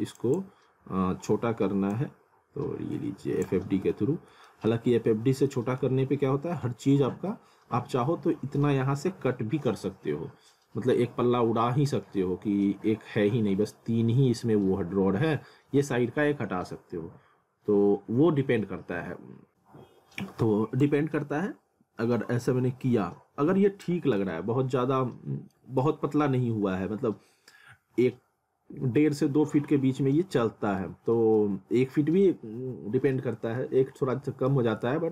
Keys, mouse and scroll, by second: 0.6 scroll up 1, 1.9 click, 3.6 w, 4.5 alt+middle click, 4.9 scroll up 1, 5.5 middle click, 6.9 ctrl+z, 20.8 click, 24.3 alt+middle click, 30.8 alt+middle click, 33.6 alt+middle click, 34.7 scroll up 1.